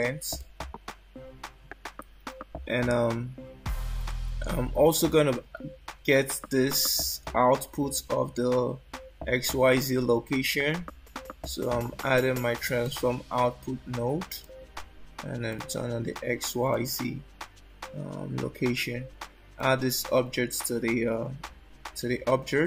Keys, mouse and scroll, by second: 0.4 click, 4.0 shift+a, 15.5 click, 16.3 click, 16.7 click, 19.6 click.